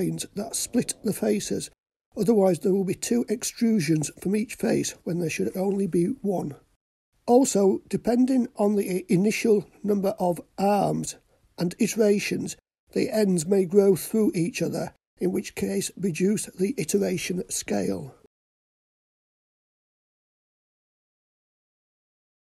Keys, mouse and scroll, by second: 2.4 click, 4.2 Tab, 6.4-7.2 scroll up 3, 10.0 click, 12.7-16.0 drag, 18.2 x.